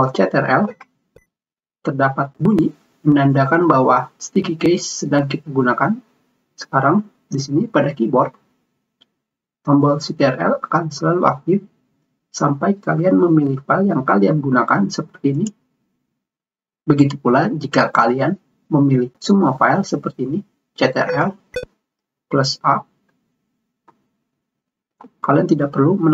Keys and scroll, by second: 23.6 a.